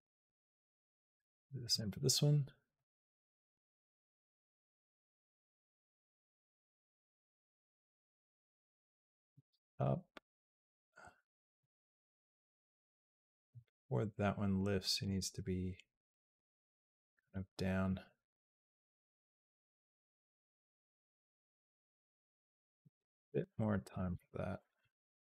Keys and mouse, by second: 1.5 click, 2.6-5.2 drag, 6.3 g, 8.4-14.8 drag, 15.9 click, 16.2 g, 17.7-21.5 drag, 22.0 click, 22.4 shift+click, 22.6 g, 23.4 click, 23.7 click, 23.9 g.